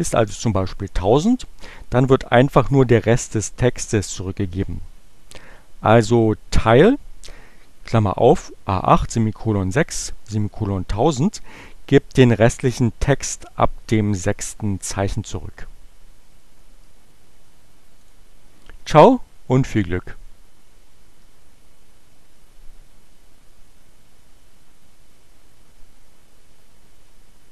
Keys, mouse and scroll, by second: 18.1 click.